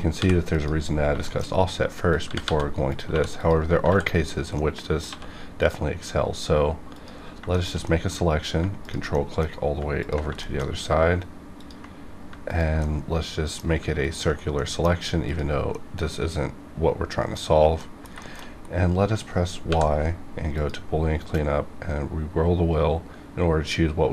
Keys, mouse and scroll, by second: 0.4 click, 0.9 scroll down 1, 1.2 shift+middle click, 1.5 scroll down 1, 2.0 click, 2.2 g, 2.3 g, 2.8 click, 3.0 2, 3.3 click, 3.8 ctrl+x, 4.0 ctrl+scroll down 2, 4.5 middle click, 5.0 1, 5.5 click, 7.2 scroll down 1, 7.5 shift+middle click, 7.8 middle click, 8.8 ctrl+click, 8.9 ctrl+click, 9.1 middle click, 9.9 ctrl+click, 10.4 shift+middle click, 11.5 ctrl+click, 12.4 ctrl+click, 12.8 middle click, 13.9 ctrl+click, 14.5 middle click, 15.3 ctrl+click, 15.6-17.7 middle drag, 18.2 shift+middle click, 18.4-18.8 shift+scroll up 2, 19.6 y, 20.4 click, 20.5 click, 21.3-22.4 scroll up 1, 22.4-24.1 scroll down 1.